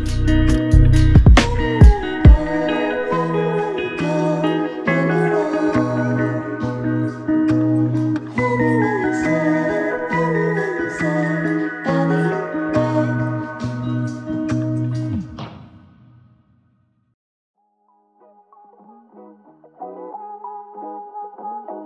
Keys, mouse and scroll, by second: 1.3-1.9 typing, 3.0 ctrl+alt+click, 10.0-10.3 typing, 13.2 typing, 17.1 typing, 19.8 typing, 20.8-21.2 typing.